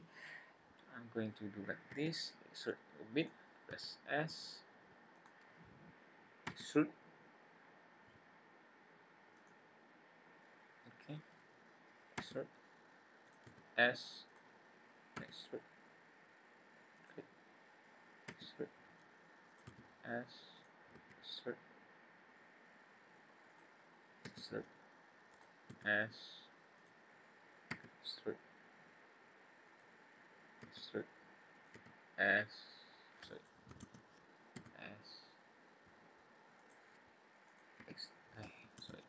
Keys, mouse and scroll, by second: 1.9 e, 3.7 s, 6.5 e, 11.0 scroll up 2, 12.1 e, 13.4 s, 15.1 e, 18.3 e, 19.7 s, 20.9 e, 24.3 e, 25.7 s, 27.7 e, 30.5 e, 31.7 e, 33.8 ctrl+z, 34.5 s, 37.4 click, 37.9 e.